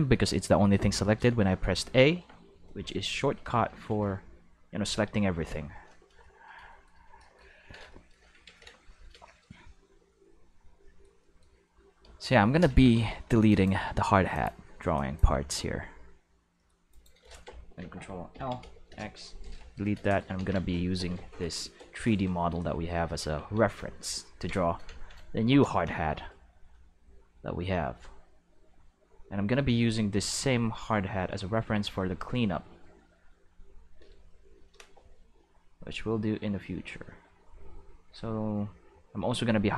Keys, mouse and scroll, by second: 0.2 shift+middle drag, 1.3 q, 2.6-4.8 typing, 8.4 ctrl+s, 10.4-10.9 shift+middle drag, 12.7 alt+a, 12.9 c, 13.5 click, 14.3 click, 14.9 click, 16.9 right click, 18.3 ctrl+l, 18.6 x, 18.9 Return, 20.3 ctrl+s, 23.2 ctrl+Tab, 23.7 click, 24.6 shift+middle click, 27.8-29.0 drag, 29.5-33.9 drag, 34.9-39.7 drag.